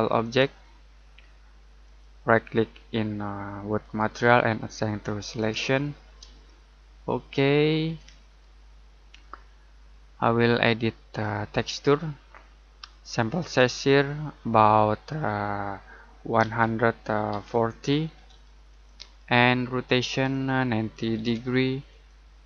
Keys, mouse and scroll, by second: 0.2 click, 6.5 shift+middle click, 8.0 middle click, 8.5-10.3 scroll up 1, 10.3 click, 13.5 click, 16.4 click, 16.9-18.1 typing, 18.7 click, 20.7-21.6 typing, 21.9 click.